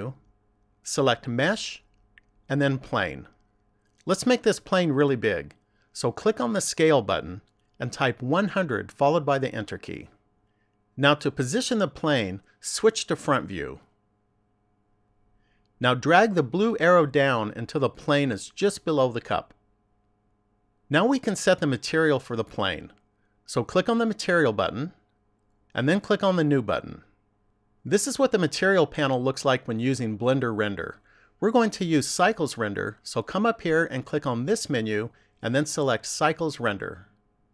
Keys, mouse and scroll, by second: 6.2 click, 12.8 click, 14.5 click, 17.2 click, 23.2 click, 26.2 click, 33.4 click.